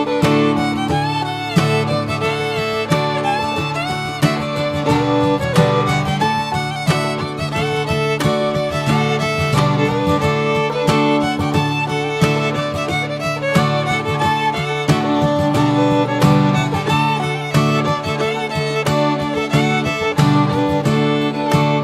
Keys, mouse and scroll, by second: 0.1 scroll up 3, 0.3 Tab, 3.2 Tab, 3.4 scroll down 3, 4.0-4.5 shift+middle drag, 4.6 scroll down 1, 4.9-6.3 middle drag, 6.3 click, 7.1 Tab, 7.5 Tab, 7.8 drag, 8.2-9.7 middle drag, 9.7 drag, 11.5 ctrl+a, 13.0 click, 14.3 click, 16.8-18.1 drag, 18.4 scroll down 3, 20.4 click, 21.4 scroll down 1.